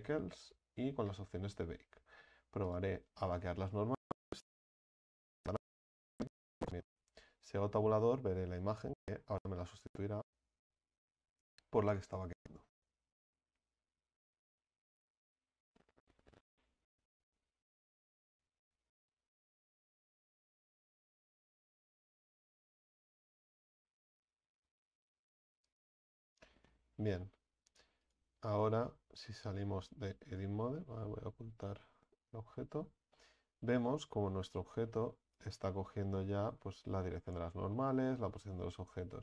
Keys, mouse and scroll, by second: 4.6 click, 7.5 Tab, 10.8-12.3 scroll up 1, 28.1 right click, 28.9 Tab, 30.3 right click, 32.2 h, 33.1-34.6 middle drag, 34.6-35.3 scroll up 5, 35.3 right click, 35.7-36.9 middle drag, 36.9-37.2 scroll up 2, 37.2-37.6 scroll down 7, 37.7-39.2 middle drag.